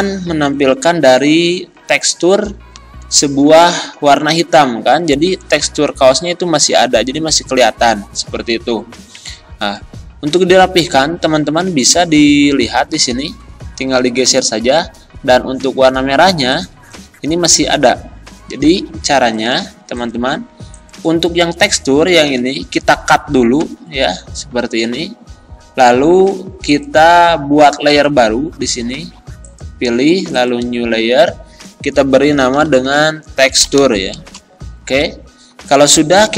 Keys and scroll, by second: 5.2 Up, 6.0 Down, 7.0 Left, 13.2 Right, 14.8 Right, 22.4 ctrl+z, 23.7 ctrl+x, 32.4-33.8 typing, 34.3 Return.